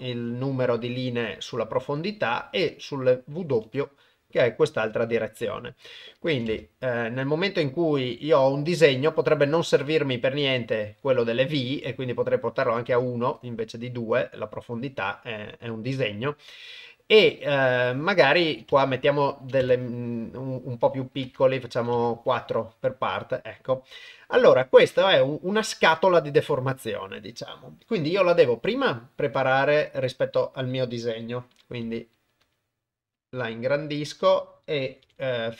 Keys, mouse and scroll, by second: 0.4 middle click, 2.1-3.4 shift+drag, 3.9-5.5 middle drag, 6.3 click, 7.4-9.0 middle drag, 12.4 click, 13.6-16.1 middle drag, 18.5 click, 19.4 click, 20.9 click, 21.6 click, 22.6 middle click, 24.0 middle click, 24.6 middle click, 26.4 KP_1, 28.7 s, 31.5 g, 32.4 s, 35.0 g.